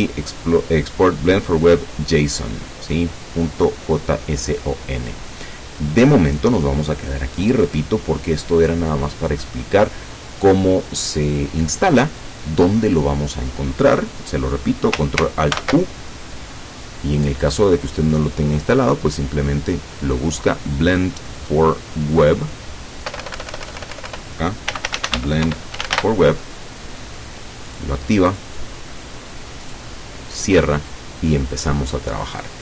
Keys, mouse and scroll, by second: 5.1 click, 15.6 ctrl+alt+u, 18.1 click, 21.3 click, 21.9 click, 23.1 BackSpace, 24.5-26.5 typing, 27.8 click, 28.3 click, 29.7 click.